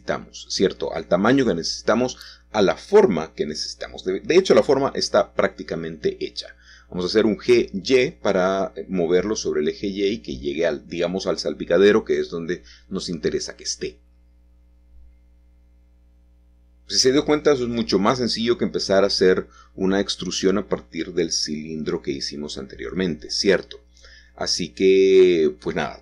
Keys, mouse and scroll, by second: 1.1-3.6 middle drag, 6.3 click, 6.6-8.9 middle drag, 13.6 shift+click, 18.2 middle click, 18.5-19.5 scroll down 2, 21.1 ctrl+shift+s, 22.2 KP_Add, 23.9 Return, 25.3-26.0 scroll down 2.